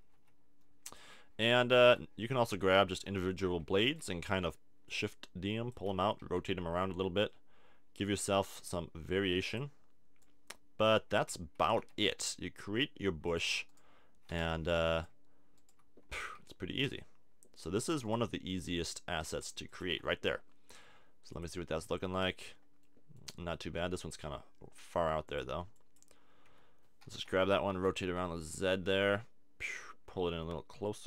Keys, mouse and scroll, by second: 0.1 s, 1.1 middle click, 1.8 a, 2.9 l, 3.8 shift+d, 4.0-5.3 drag, 5.9 r, 6.0 click, 8.2 click, 9.3 shift+d, 9.5-10.9 drag, 11.2 r, 13.3 click, 15.4-16.8 drag, 16.3 g, 17.6 click, 18.7 g, 19.6 click, 19.8 a, 19.9 Tab, 22.8 middle click, 25.2 click, 25.7 click, 26.5 Tab, 27.1 l, 27.7 r.